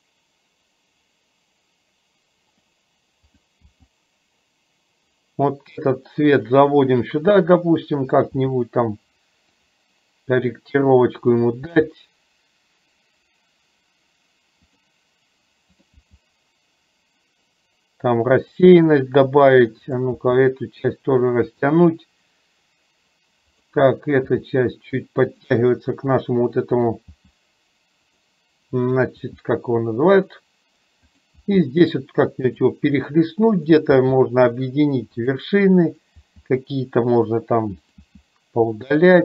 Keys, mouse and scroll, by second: 3.4 click, 3.8 g, 8.0 click, 8.4 g, 11.4 click, 11.8 g, 16.0 g, 20.0 click, 20.3 g, 23.5 click, 24.4 g, 26.9 click, 27.2 g, 29.3 g, 31.5 g, 33.7 click, 34.0 g, 36.0 click, 36.3 g, 38.0 click, 38.2 g.